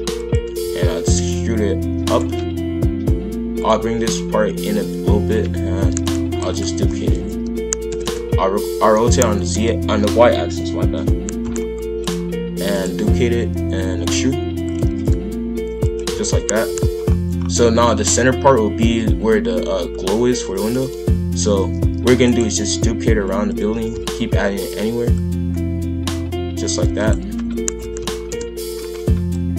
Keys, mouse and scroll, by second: 0.6 e, 3.6 click, 4.6 click, 5.8 ctrl+l, 6.4 shift+d, 6.8 r, 12.0 click, 12.6 shift+d, 13.3 e, 14.8 shift+f, 16.1 a, 16.6 KP_5, 16.7 KP_1, 17.0-17.7 scroll up 3, 17.8-22.1 shift+middle drag, 22.1 shift+d, 22.4 g, 23.7 shift+f, 25.1 click, 26.8 shift+d, 27.4 r, 29.3 click.